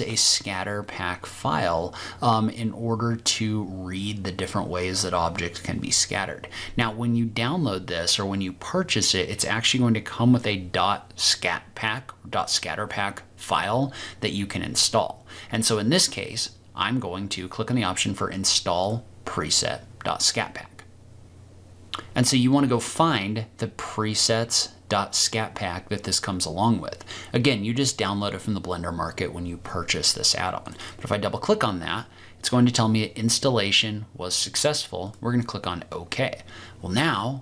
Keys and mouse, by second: 18.8 click.